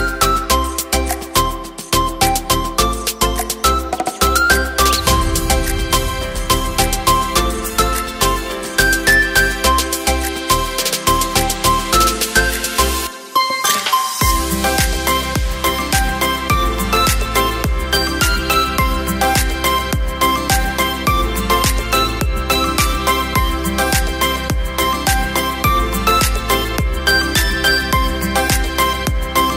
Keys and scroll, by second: 20.7 Caps_Lock, 24.3 v.